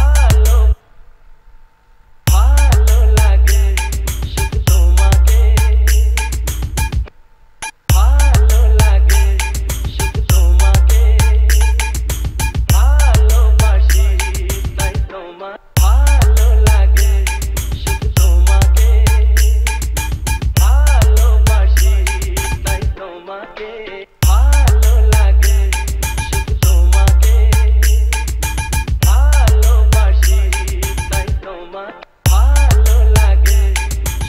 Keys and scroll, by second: 1.0 space, 2.6 space, 7.2 space, 15.8 space, 24.3 space, 32.2 space.